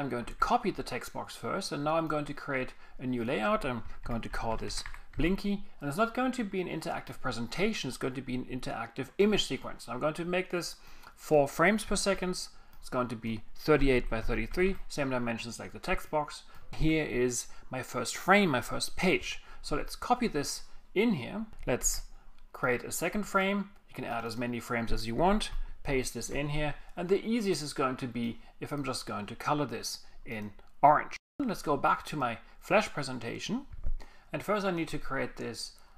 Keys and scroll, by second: 0.2 super+c, 3.8-5.8 typing, 11.9 4, 13.6-14.7 typing, 16.8 super+0, 19.7 super+v, 21.8 super+c, 25.9 alt+shift+super+v.